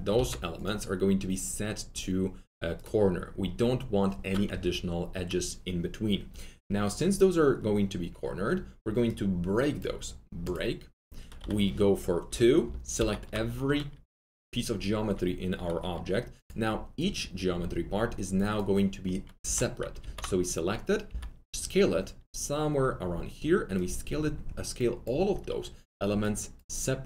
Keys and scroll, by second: 4.4 F3, 11.3 2, 12.9 ctrl+a, 19.9 ctrl+a, 21.0 r.